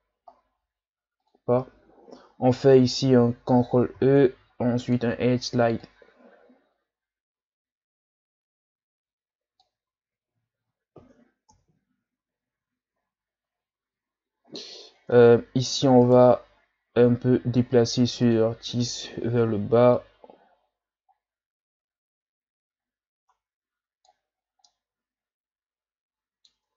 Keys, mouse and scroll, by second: 1.2 click, 2.0-2.6 shift+scroll down 4, 2.7-3.9 shift+scroll up 9, 3.9 ctrl+e, 10.3 Tab, 10.7-11.5 scroll down 1, 11.5 KP_1, 13.0-14.5 scroll up 10, 14.5 ctrl+scroll down 3, 14.8 scroll up 1, 15.1 Tab, 16.0 right click, 16.5-17.3 ctrl+scroll down 3, 18.2 click, 19.9-23.0 drag, 24.4 scroll down 2, 24.7-26.5 middle drag, 26.5 Tab.